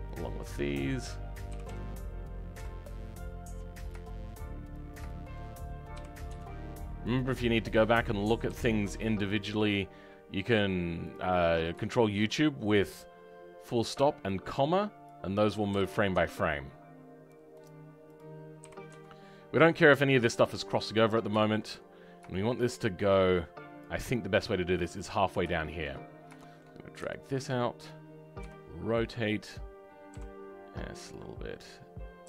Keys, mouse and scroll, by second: 1.5 g, 23.8 click, 26.9 g.